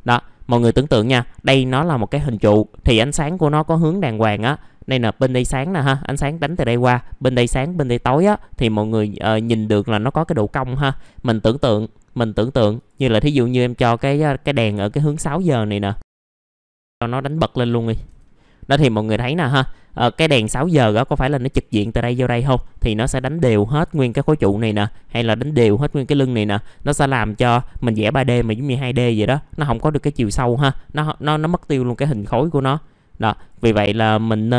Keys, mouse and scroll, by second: 0.0-0.5 scroll up 1, 5.7 scroll down 1, 15.1 click, 17.8 click, 20.1 KP_3, 21.4 middle click, 23.2-23.5 scroll down 1, 24.6 scroll up 1, 26.9 scroll down 1.